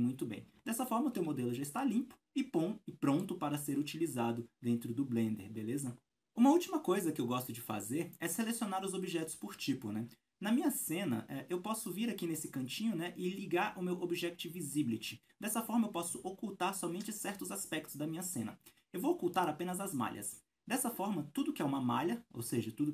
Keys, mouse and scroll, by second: 0.7-19.3 shift+middle drag, 1.2 alt+a, 1.4-1.8 scroll down 2, 19.3-22.9 drag, 22.3-22.9 scroll down 2.